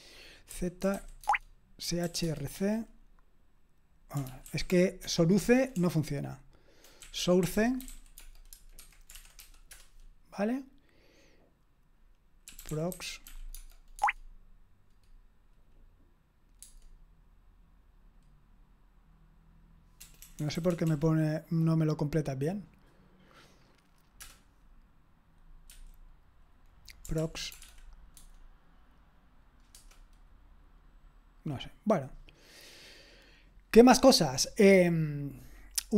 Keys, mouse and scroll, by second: 0.6-2.0 typing, 2.2 Tab, 2.5 Return, 4.2 ctrl+p, 4.5 ctrl+a, 5.1 alt+f, 5.4-7.4 typing, 8.5-9.9 typing, 12.2-13.8 typing, 14.0 Tab, 16.6 Tab, 20.0-20.7 typing, 25.7 q, 27.2 ctrl+p, 27.5 space, 27.6 -, 28.2 Tab, 34.5-35.9 scroll up 1.